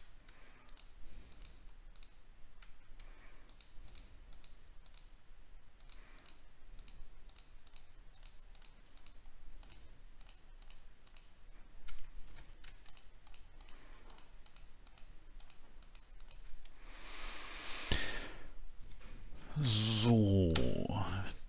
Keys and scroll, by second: 12.3 ctrl+z, 19.0 alt+scroll down 1, 20.8 alt+scroll down 1.